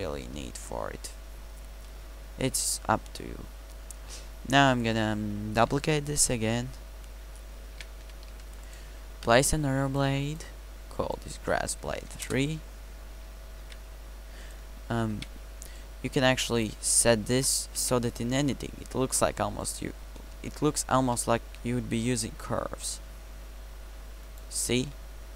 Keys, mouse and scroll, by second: 7.8 shift+d, 9.2 KP_Decimal, 12.0 BackSpace, 13.6 ctrl+c, 15.2 ctrl+v, 17.9 Tab, 21.0 g, 24.8 g.